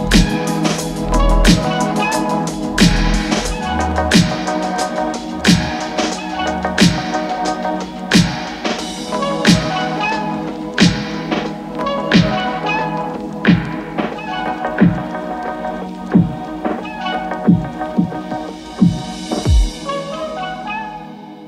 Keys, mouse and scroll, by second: 0.9 F9, 1.8-18.8 drag, 18.8 n, 19.5-21.0 drag, 21.0 space.